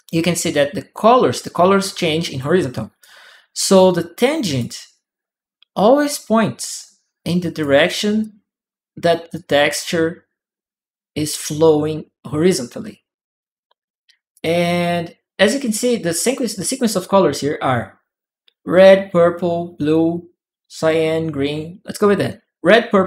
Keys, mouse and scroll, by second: 2.8-4.3 ctrl+right drag, 3.5-5.5 ctrl+drag, 5.8 click, 7.3 click, 8.0 click, 9.1 click, 14.1 click.